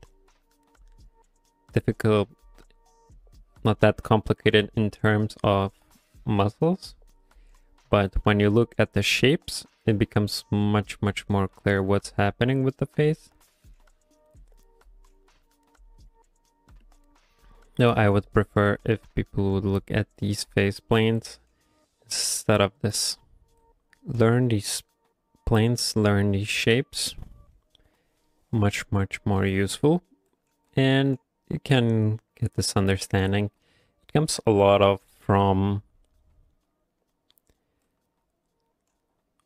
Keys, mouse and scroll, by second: 26.7 right click.